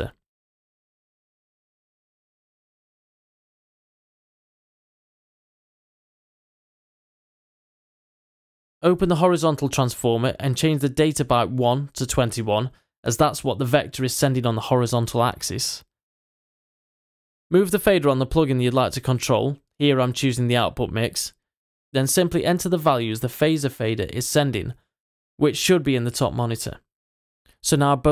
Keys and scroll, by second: 0.0-1.7 typing, 2.2 Return.